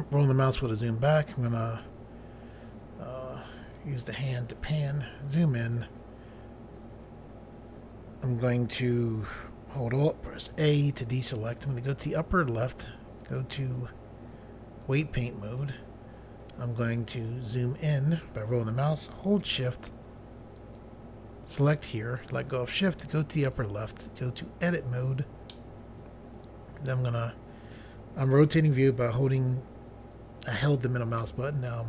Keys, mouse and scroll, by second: 3.7 click, 4.9 scroll up 1, 6.5 scroll up 1, 10.2 alt+a, 13.1 click, 14.7 click, 17.2-18.4 scroll up 1, 20.5 shift+click, 23.5 click, 24.6 click, 25.5 middle click, 31.2 c.